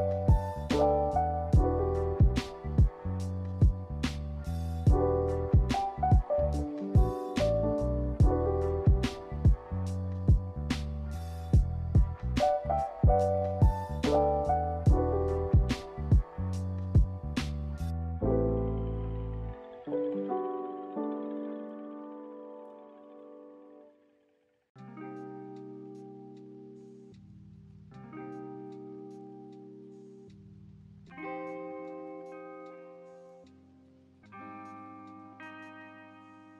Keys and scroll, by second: 8.2 z, 15.8 a, 20.6 b, 22.2-23.2 typing.